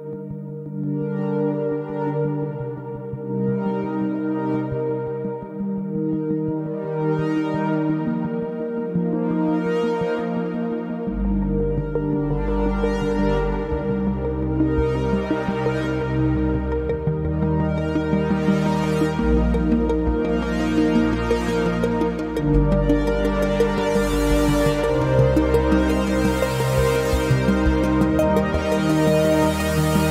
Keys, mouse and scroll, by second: 2.8 middle click, 3.6-4.1 scroll up 3, 4.6 /, 5.1 middle click, 5.7-6.5 scroll up 1, 6.5 Tab, 6.8-7.2 scroll down 3, 7.2-8.0 middle drag, 8.0 Tab, 8.2-8.7 scroll up 4, 8.7-10.2 middle drag, 10.2 q, 15.9 click, 16.8-18.8 middle drag, 18.8 ctrl+z, 19.8 q, 24.6 middle click, 25.4 i, 27.6 middle click, 28.4 q.